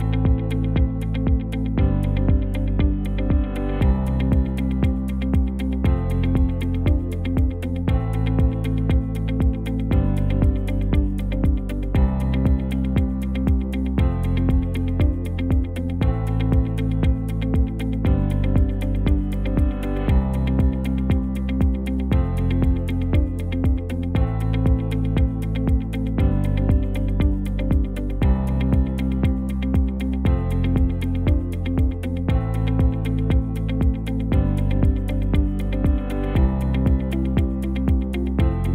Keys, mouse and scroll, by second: 2.1 shift+a, 22.3 ctrl+shift+d, 29.0 shift+d.